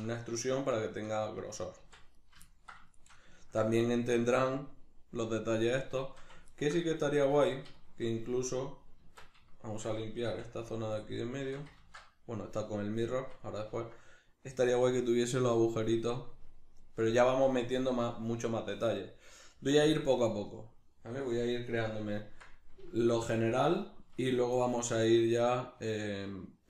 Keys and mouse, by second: 1.4 right click, 1.8 Tab, 2.1 right click, 2.5-6.9 ctrl+middle drag, 6.9 right click, 7.3 Tab, 7.7-10.7 shift+middle drag, 9.0 Tab, 10.9-13.7 shift+drag, 11.8 ctrl+z, 13.7-24.5 ctrl+middle drag, 24.5 right click, 24.9-26.6 shift+middle drag.